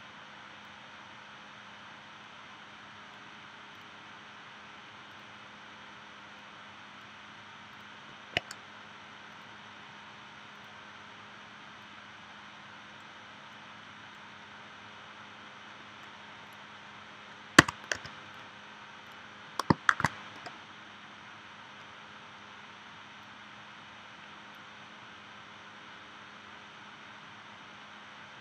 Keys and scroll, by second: 17.6 c, 19.9 shift+w.